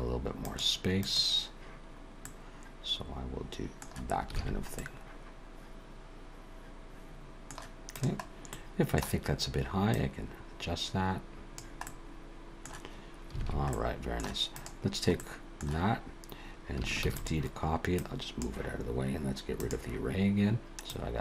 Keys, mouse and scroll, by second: 0.4 click, 1.0 click, 2.2 middle click, 4.4 alt+a, 4.8 middle click, 7.9 click, 8.4 middle click, 9.9 click, 11.8 middle click, 13.4 alt+a, 13.7 middle click, 14.5 click, 15.2 middle click, 17.0 shift+d, 18.0 click, 19.5 click, 20.9 click.